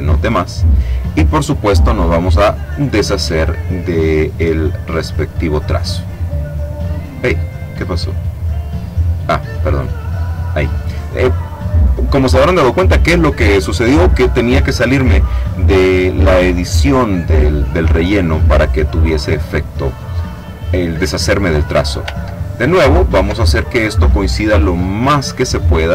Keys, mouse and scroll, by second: 1.4 click, 2.3 click, 3.5-4.8 drag, 5.1 click, 8.3 click, 10.2 click, 22.2-23.3 ctrl+scroll up 4, 23.7 ctrl+click, 24.8 click.